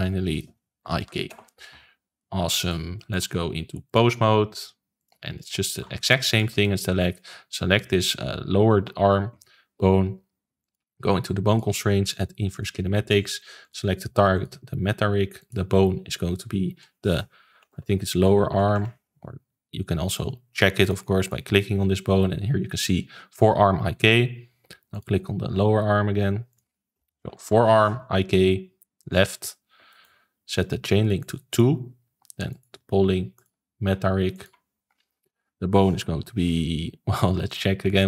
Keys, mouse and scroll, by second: 0.0 Left, 2.6 click, 2.9 middle click, 3.8-5.4 drag, 5.6-5.9 shift+middle drag, 5.9 ctrl+s, 6.3 click, 6.6-10.0 shift+middle drag, 10.6 click, 11.4-18.4 drag, 18.4 BackSpace, 18.5 BackSpace, 21.1 click, 24.9 click, 26.5-29.5 drag, 29.8-31.1 shift+middle drag, 31.1-37.4 drag, 37.8 click.